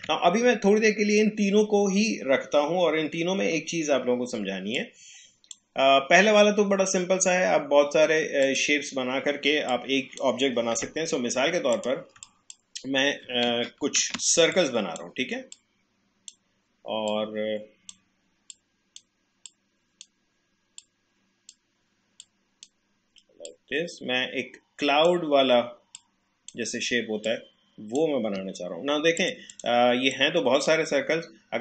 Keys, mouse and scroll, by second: 4.7-8.0 drag, 8.4 click, 10.7 Delete, 11.7 click, 12.2 shift+click, 14.0 ctrl+z, 14.6-31.6 shift+drag.